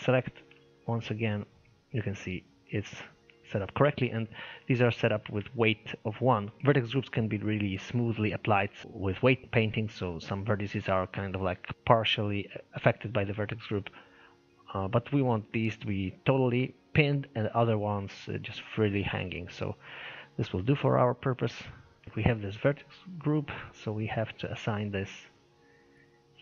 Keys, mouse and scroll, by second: 0.1-0.5 scroll up 1, 0.5 shift+middle click, 1.0 scroll up 1, 1.2-3.5 middle drag, 3.5-4.5 scroll down 2, 4.5-6.6 middle drag, 17.5-18.0 scroll down 1, 18.0-21.1 shift+middle drag, 21.6-22.0 scroll up 1, 22.0 click, 24.2 click, 24.9-26.0 scroll down 19.